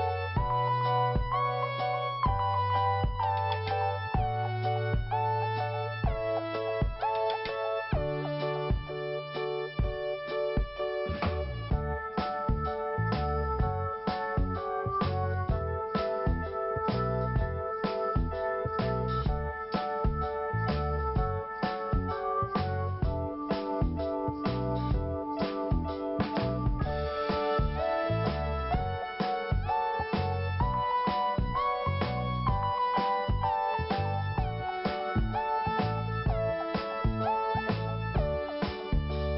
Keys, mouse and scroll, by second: 0.4 scroll up 1, 2.6 click, 3.2 click, 4.5 scroll down 1, 5.7-6.2 scroll up 1, 6.6 click, 7.3 click, 7.4 click, 10.2 click, 11.3 scroll down 1, 12.3 scroll up 1, 13.6 scroll up 1, 14.6 click, 14.7 click, 15.4 scroll up 1, 16.9 click, 17.6 click, 19.4 click, 19.5 click, 21.7 click, 22.7 click, 25.0 click, 27.7 click, 27.8 click, 29.6 click, 31.0 click, 31.2 click, 32.2 click, 32.3 click, 36.9 click, 37.1 click, 38.7 click, 38.9 click.